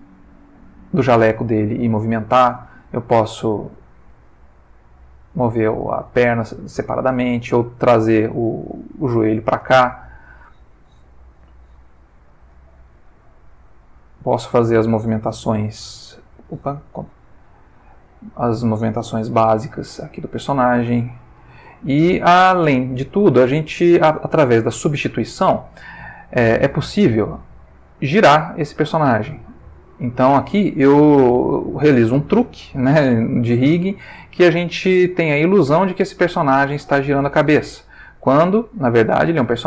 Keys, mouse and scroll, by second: 2.1 shift+middle click, 3.3 click, 4.2 r, 5.5 Escape, 6.2 click, 6.9 g, 9.2 Escape, 10.1 click, 11.7 alt+g, 12.5 alt+click, 13.0 alt+r, 14.2 Escape, 14.9 click, 15.7 alt+g, 17.0 ctrl+z, 17.9 ctrl+click, 19.3 alt+g, 20.0 alt+shift+middle click, 21.0 click, 21.4 r, 22.4 Escape, 23.3 shift+middle click, 24.4-24.9 ctrl+shift+middle drag, 26.4 click, 28.0-37.4 drag, 37.8 middle click, 38.8-39.6 ctrl+middle drag.